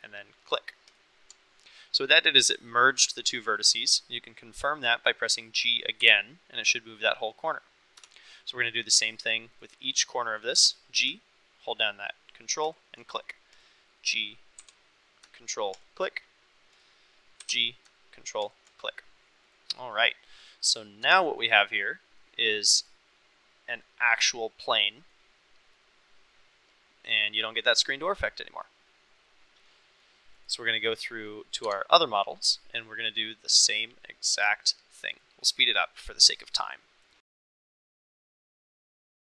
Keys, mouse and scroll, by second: 0.9 ctrl+click, 6.0 g, 8.0 Escape, 10.5 g, 12.7 ctrl+click, 14.6 g, 15.8 click, 17.4 g, 18.5 click, 19.5 click, 19.8 middle click, 20.3 middle click, 21.8-22.2 middle drag, 22.4 click, 22.9-25.1 middle drag, 25.8-27.1 middle drag, 27.6-30.0 middle drag, 29.3 click, 30.4 click, 30.8 middle click, 31.6 Tab, 37.8 g, 38.0 ctrl+click, 38.3 g, 38.6 g, 39.1 g.